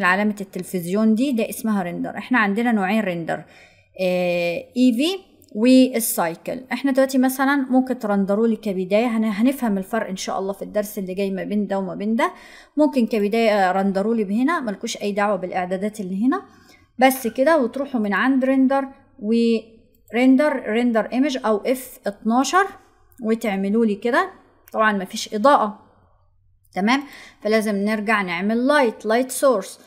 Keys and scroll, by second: 21.6 F12.